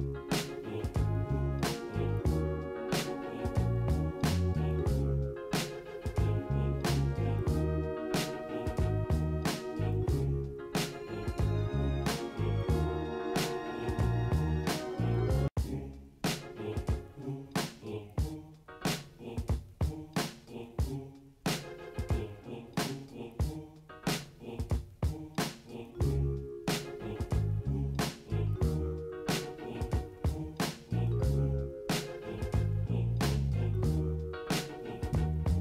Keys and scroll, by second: 7.6 ctrl+shift+g, 9.1 ctrl+t, 10.0 ctrl+space, 11.5 Return, 15.5 ctrl+z, 16.1 ctrl+shift+i, 19.3 typing, 22.3 ctrl+space, 22.9 typing, 24.0 ctrl+shift+i.